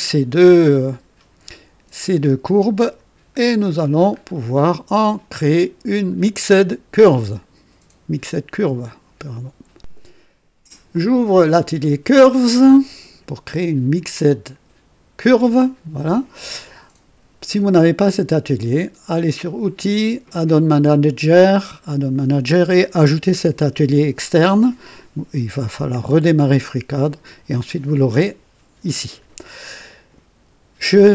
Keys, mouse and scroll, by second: 3.4 scroll down 2, 3.8 scroll up 2, 4.3-4.9 right drag, 5.5 click, 8.6 right click, 10.8 click, 12.0 click, 19.3 click, 21.4 right click.